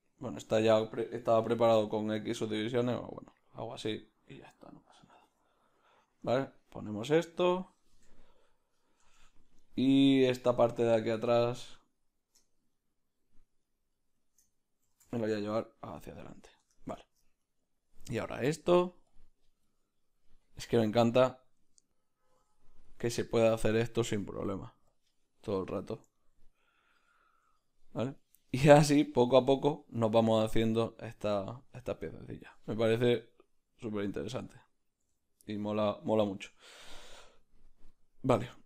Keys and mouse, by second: 0.4 alt+right click, 1.3 s, 4.0-8.1 middle drag, 5.2 s, 8.1 Tab, 8.2-12.0 middle drag, 9.1 Tab, 12.0-14.4 right drag, 14.4-17.4 middle drag, 14.8 g, 16.7 Tab, 17.4-19.2 right drag, 19.2-25.5 drag, 25.5-32.7 middle drag, 32.7-35.0 right drag, 35.0 s.